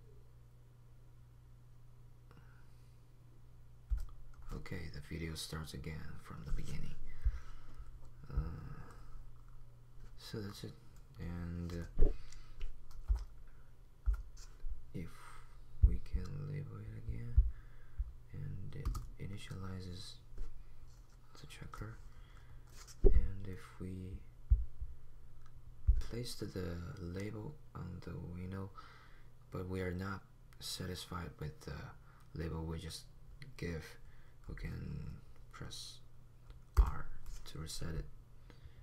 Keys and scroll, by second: 3.9 typing, 5.0 typing, 13.0 p, 13.2 p, 14.0 p, 15.3 p, 36.7 r.